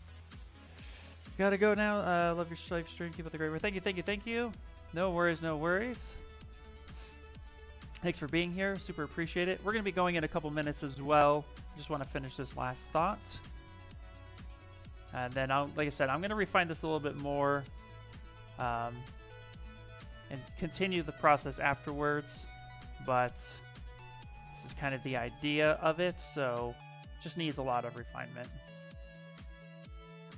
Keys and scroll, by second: 12.2 s, 14.9 s, 20.2 s, 27.8 s.